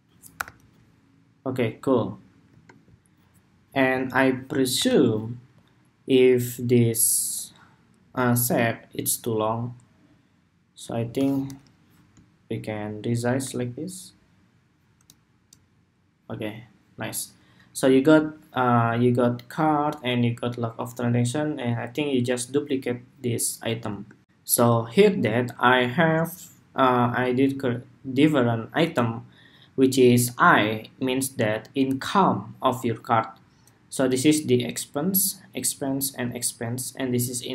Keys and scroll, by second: 0.0 super+-, 4.5 super+=, 23.9 shift+super+2.